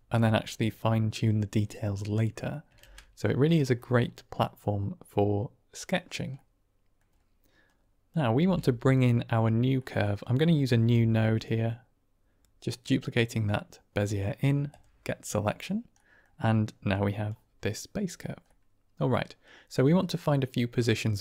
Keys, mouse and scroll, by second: 2.0-2.4 middle drag, 2.7 ctrl+space, 3.7 middle click, 6.4 middle click, 7.5-8.1 drag, 8.3 g, 9.8 middle click, 10.5 click, 10.8 shift+d, 15.8 middle click, 17.0 drag, 18.5 middle click, 19.5-21.2 drag.